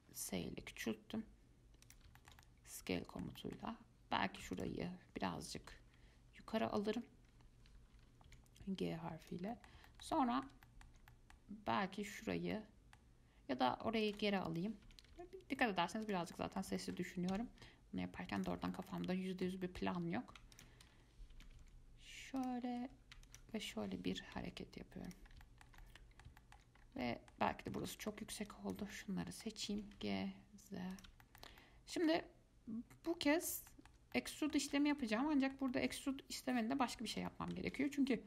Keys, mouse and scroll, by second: 0.4 s, 2.4-4.8 shift+middle drag, 4.8 alt+click, 5.9 g, 9.7-12.3 middle drag, 12.3 click, 12.7-14.2 middle drag, 14.2 alt+click, 15.0 g, 16.5 middle click, 17.5 s, 18.9-20.7 shift+middle drag, 20.7 alt+click, 21.5 g, 23.5 alt+click, 24.3 g, 25.5 scroll down 1, 25.6-27.0 shift+middle drag, 27.0 scroll up 3, 27.2-28.7 shift+middle drag, 28.7 click, 29.1 shift+middle click, 29.9 g, 31.4-38.2 shift+middle drag.